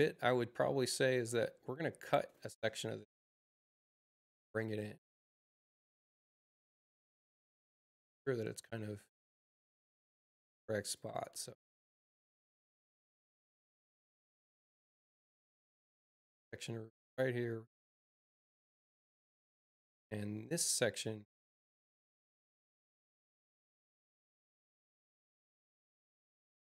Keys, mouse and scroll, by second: 3.6 u, 4.5 click, 5.8 click, 9.0 click, 10.7 click, 12.4 space, 13.8 click, 16.2-18.1 drag, 19.9 click, 25.2 click.